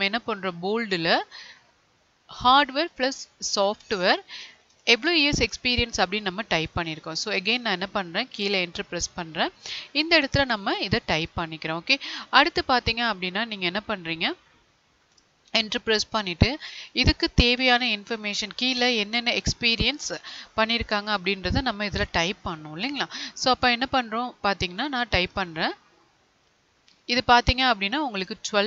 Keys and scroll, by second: 4.6 ctrl+c, 8.8 ctrl+v.